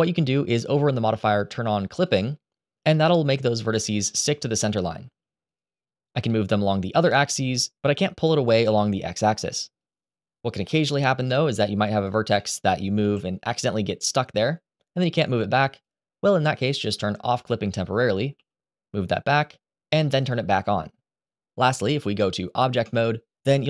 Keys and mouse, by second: 1.8 click, 4.0 g, 6.7 g, 7.5 click, 7.8 middle click, 8.3 middle click, 9.4 g, 10.4 middle click, 11.7 click, 12.1 middle click, 12.7 g, 14.7 g, 17.1 click, 18.1 g, 18.9 click, 19.9 click.